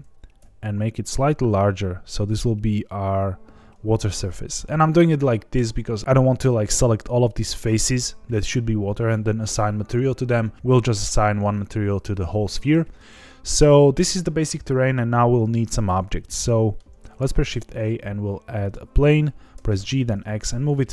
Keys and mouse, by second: 0.3 s, 12.6 Tab, 13.8 middle click, 15.9-16.7 middle drag, 17.0 shift+a, 19.5 g, 19.7 x, 20.8 click.